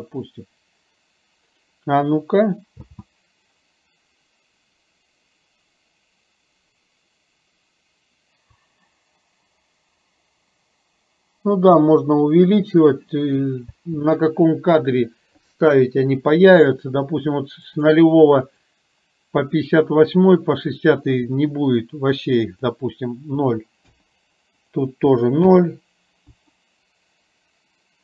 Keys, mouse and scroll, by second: 2.8 space, 13.8 space, 16.6 click, 17.8 drag, 18.6 click, 19.4 click, 22.7 click, 24.8 click.